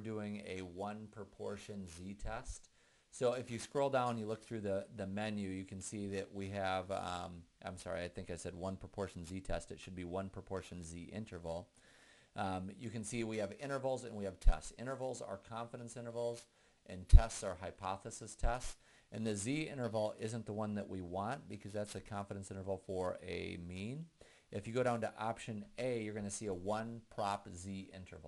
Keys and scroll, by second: 3.6 Down, 4.1 Down, 20.3 Down, 22.9 Down, 26.1-28.2 Down.